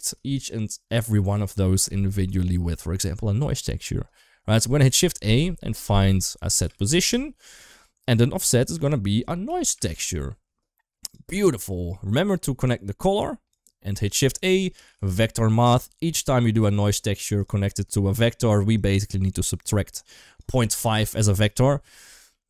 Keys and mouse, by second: 4.7 shift+a, 8.4-10.9 drag, 11.2 shift+middle click, 12.0 click, 12.4-13.4 drag, 13.9 shift+a, 16.8 g, 17.9 shift+middle click, 18.6-19.6 drag, 20.0-21.3 drag, 22.2 shift+middle click.